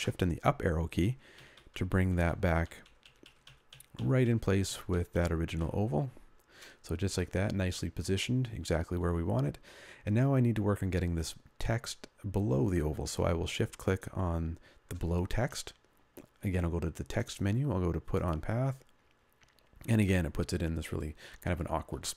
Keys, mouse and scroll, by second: 0.0 shift+Up, 2.0 shift+Up, 3.0 shift+Up, 3.1 shift+Up, 3.4-4.0 shift+Up, 4.6 shift+Up, 4.8 shift+Up, 5.0 shift+Up, 5.5 shift+Up, 13.8 shift+click.